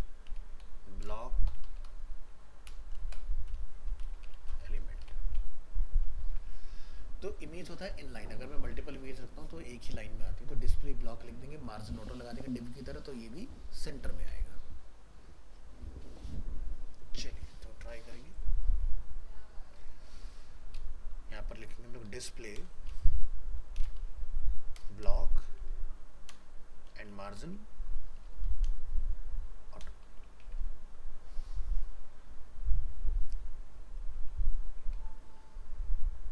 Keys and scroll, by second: 6.2 ctrl+s, 30.4 ctrl+s.